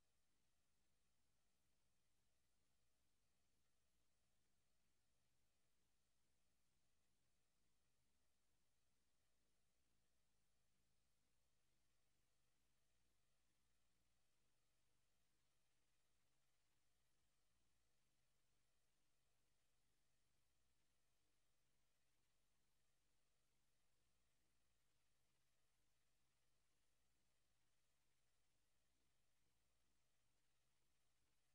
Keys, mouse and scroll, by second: 11.5 click, 13.1 KP_0, 15.2 click, 19.5 right click, 21.9 click, 24.2 click.